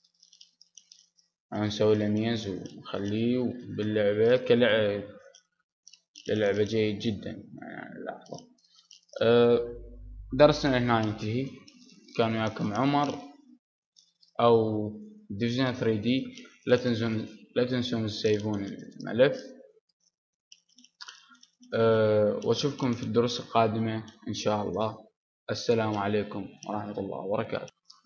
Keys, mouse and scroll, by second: 1.1 right click, 1.5-5.6 middle drag, 6.0-7.9 middle drag, 8.4-13.7 middle drag, 13.7-15.0 drag, 15.8-18.1 middle drag, 18.1-19.1 drag, 20.7-23.9 middle drag.